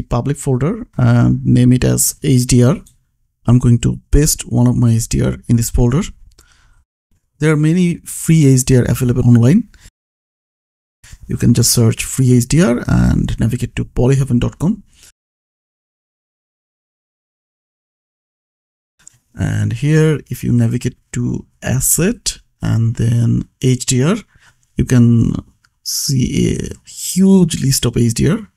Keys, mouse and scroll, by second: 0.0 click, 0.8 right click, 1.8 click, 2.8 h, 5.2 click, 5.9 ctrl+v, 7.2 click, 10.6 middle click, 11.1-12.2 typing, 13.1 Return, 15.1 middle click, 16.1 scroll down 1, 17.1 click, 19.0 scroll down 1, 20.8 scroll up 1, 21.4-22.7 scroll down 1, 22.7 click, 25.1 scroll down 1, 27.3 scroll up 1, 28.3 middle click.